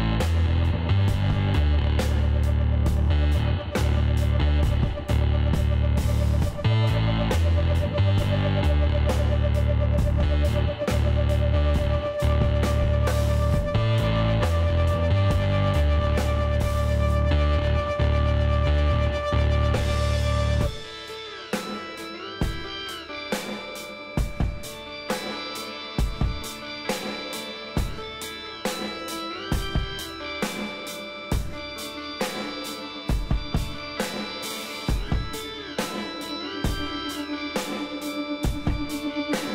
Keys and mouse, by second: 3.2 Tab, 3.5 middle click, 6.4 click, 7.3-9.2 middle drag, 11.7 Tab, 12.5-14.8 middle drag, 15.7-17.6 drag, 17.4-20.1 middle drag, 18.3-20.1 drag, 20.2 ctrl+KP_Add, 25.9 KP_1, 29.7-32.5 middle drag, 30.9 shift+d, 32.5-34.3 drag, 35.0-39.5 middle drag, 37.2 r.